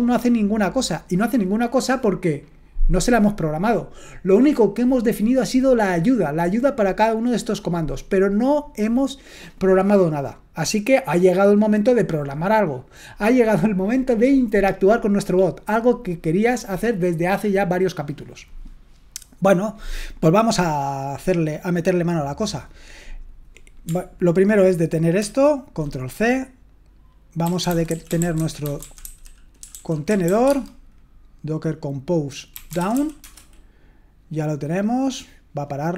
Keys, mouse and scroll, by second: 25.2 ctrl+c, 27.4-30.9 typing, 32.5-33.4 typing.